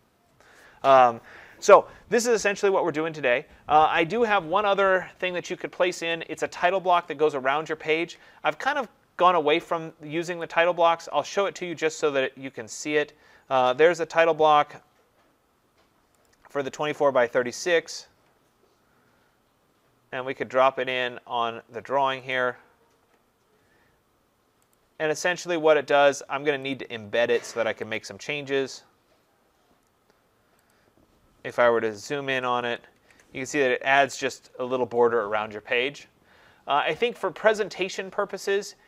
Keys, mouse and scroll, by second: 6.1 click, 10.4 click, 16.3 click, 17.7 click, 22.4 click, 24.8 click, 26.8 click, 28.0 click, 30.7 click, 32.0 ctrl+=, 32.3 ctrl+=, 32.6 ctrl+=, 33.0 ctrl+=, 36.0-37.6 scroll down 28, 37.6-38.8 scroll.